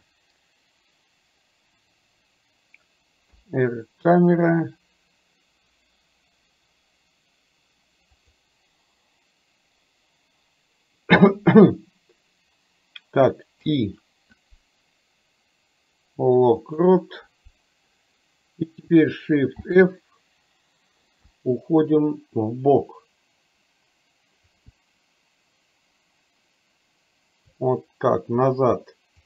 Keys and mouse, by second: 19.7 shift+f.